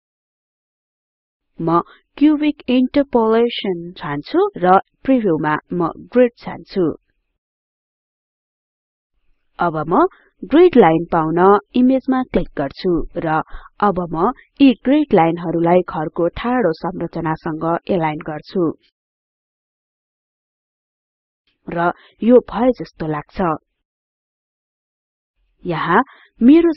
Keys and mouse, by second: 2.6-4.6 drag, 5.1 click, 8.1 click, 14.1 click, 19.1-24.6 drag.